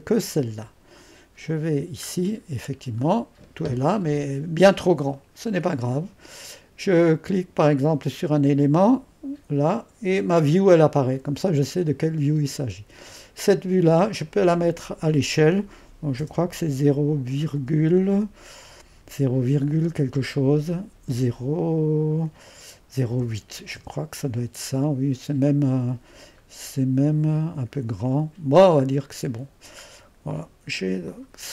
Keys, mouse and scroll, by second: 0.0-2.1 drag, 2.1-4.8 scroll down 1, 4.8-5.2 scroll up 1, 8.3-11.5 drag, 14.3-16.2 drag, 16.2 typing, 17.6 typing, 21.1 typing, 23.1 typing, 23.8 Return, 26.5-27.1 scroll up 1, 26.5 typing, 27.1-30.3 scroll up 1, 31.1-31.5 drag.